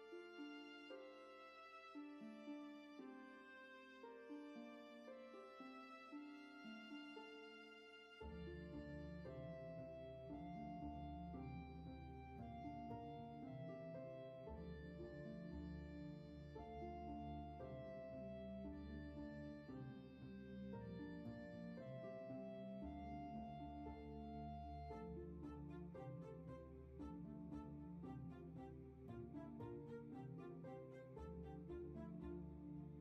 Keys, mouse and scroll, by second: 2.5 scroll up 1, 2.6 scroll down 1, 3.6 space.